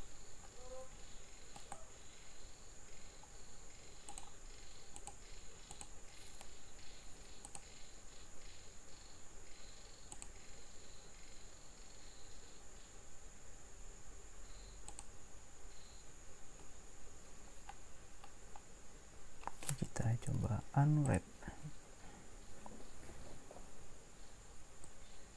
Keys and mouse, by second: 21.2 u, 25.1 right click.